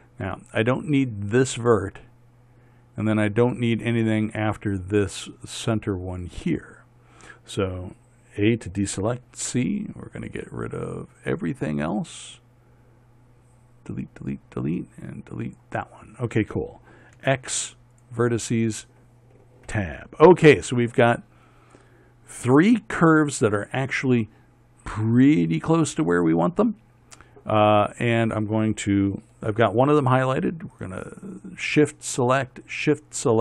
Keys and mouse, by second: 1.8-4.5 drag, 9.0 a, 9.5 c, 17.7 x, 20.2 Tab, 31.3-33.4 drag.